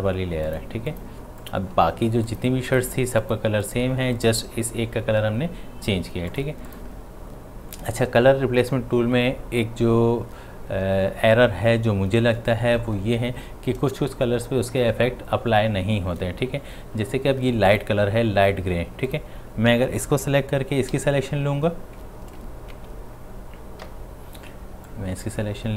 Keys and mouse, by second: 17.7 click, 20.9-21.3 typing, 22.0 Tab, 23.8 q, 24.9-25.7 drag.